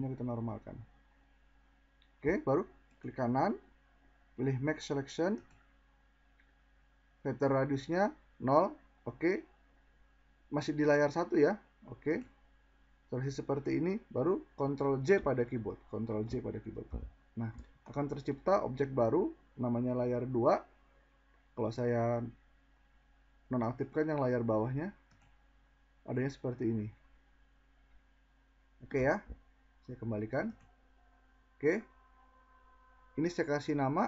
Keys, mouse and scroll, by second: 0.0 alt+scroll, 14.6 ctrl+j.